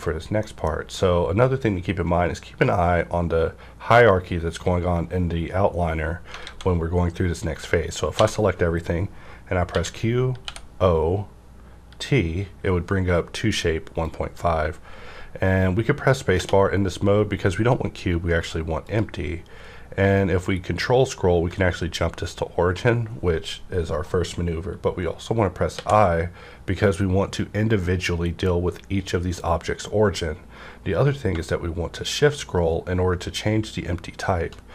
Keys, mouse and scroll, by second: 6.3 alt+Num_Lock, 6.3 middle click, 6.4 a, 8.2 alt+a, 9.6-10.4 typing, 14.1-18.5 drag, 14.1 typing, 16.1-16.8 typing, 18.8 click, 20.8-21.5 ctrl+scroll down 1, 25.7-26.7 ctrl+scroll down 1, 31.3 shift+Num_Lock, 31.3 ctrl+scroll down 1, 32.1-33.0 shift+scroll down 1, 33.0-34.6 shift+scroll down 1.